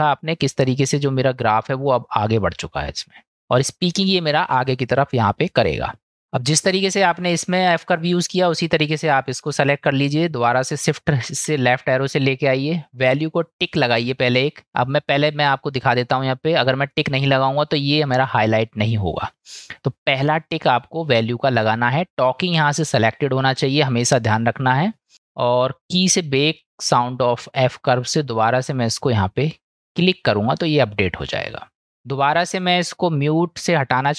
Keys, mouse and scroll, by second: 1.9 middle click, 5.3 middle click, 6.8 middle click, 11.3 shift+Left, 13.9 click, 14.9-19.3 drag, 21.7 click, 26.0-27.0 drag, 32.0 click, 32.8-34.1 drag.